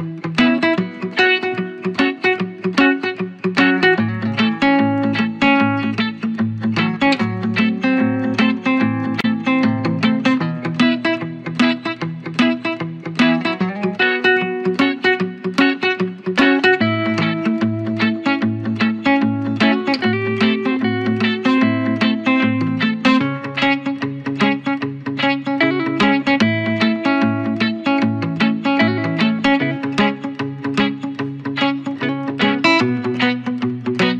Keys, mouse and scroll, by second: 2.4-20.1 drag, 22.9 ctrl+j, 23.4-32.9 drag, 33.3 right click.